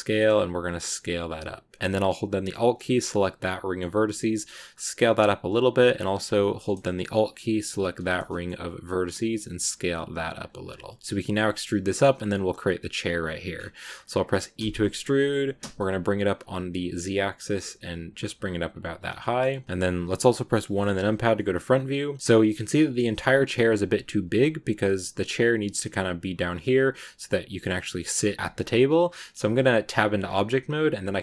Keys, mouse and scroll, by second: 2.3 alt+right click, 2.9 middle click, 3.7 scroll down 1, 3.9 s, 6.3 middle click, 6.5-7.7 scroll up 1, 7.7 alt+right click, 8.0 scroll down 1, 8.0 scroll up 1, 8.1 scroll down 1, 8.1 middle click, 8.8 s, 10.5-10.9 scroll down 3, 10.9 shift+scroll up 1, 10.9 shift+middle click, 11.8-13.3 scroll down 2, 13.3 scroll up 2, 14.5 e, 18.8 scroll down 2, 19.1-20.6 middle drag, 20.6 KP_1, 21.2 shift+middle click, 21.6-22.2 scroll up 1, 22.2-23.5 scroll up 1, 28.4-29.4 shift+middle drag, 29.4 click.